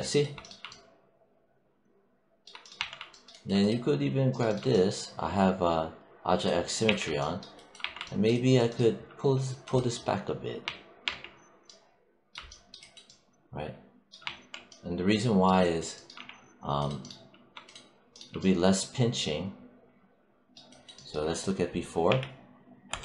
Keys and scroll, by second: 2.6 1, 6.7 w, 7.6 3, 10.5 1, 14.1 1, 16.0 3, 21.9 ctrl+z.